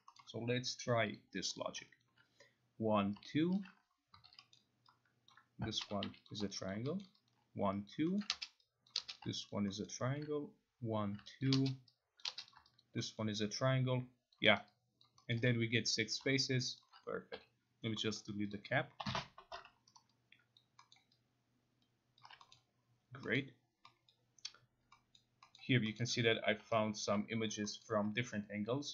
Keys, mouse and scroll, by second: 0.2 middle click, 1.2 click, 1.6 click, 2.0 alt+click, 3.2 alt+click, 3.6 alt+click, 4.2 9, 4.5-4.8 scroll, 5.3 click, 5.6-6.6 typing, 6.3 click, 6.7 alt+click, 7.0 alt+middle click, 7.9 alt+click, 8.2 alt+middle click, 8.9 click, 9.2 click, 9.9 alt+middle click, 11.2 alt+click, 11.4 alt+click, 12.2 click, 12.5 click, 13.2 alt+middle click, 14.3 alt+click, 14.6 alt+right click, 15.3 alt+middle click, 16.2 alt+middle click, 16.8 alt+click, 17.4 9, 18.1-18.5 scroll, 18.5 click, 19.0 Delete, 20.0 alt+right click, 20.9 alt+click, 20.9-21.5 alt+scroll, 22.2 alt+click, 22.5 middle click, 23.4 middle click, 24.1 middle click, 25.2 middle click, 25.6 middle click, 26.0 middle click, 27.0 alt+right click, 27.0 middle click, 27.8 alt+middle click.